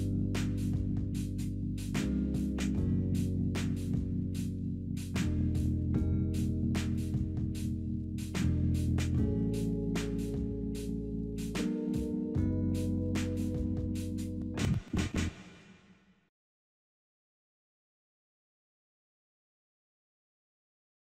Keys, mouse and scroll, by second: 1.5-2.5 drag, 4.8-5.8 scroll down 8, 6.2-7.0 scroll up 8, 17.5 scroll down 1, 18.2-18.9 scroll down 2, 18.9 scroll down 1.